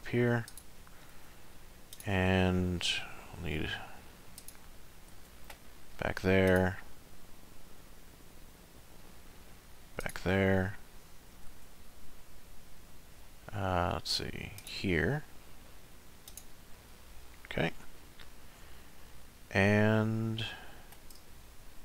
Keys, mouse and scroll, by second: 1.1 ctrl+r, 5.1 ctrl+r, 11.5 ctrl+r, 16.7 middle click, 18.0-18.5 scroll down 2, 18.5 middle click, 21.3 shift+middle click.